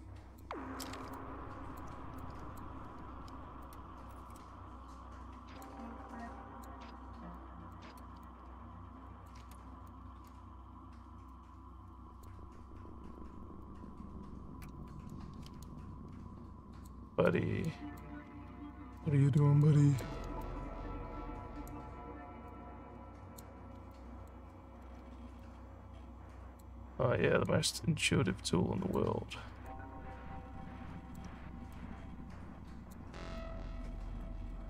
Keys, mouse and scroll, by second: 1.1 alt+click, 2.2 click, 3.7-5.6 drag, 6.1 click, 7.4 click, 8.3-9.3 alt+drag, 9.9 click, 11.3 click, 13.7-15.1 drag, 15.6-16.9 alt+drag, 17.7 alt+click, 18.4 scroll up 4, 19.0 alt+middle click, 19.6 alt+click, 20.4-21.7 drag, 22.4 click, 23.9 alt+click, 24.5 alt+middle click, 25.4-26.6 drag, 27.5-29.0 drag, 29.6-31.2 alt+drag, 31.7-33.0 drag, 33.4 alt+click, 34.5 alt+middle click.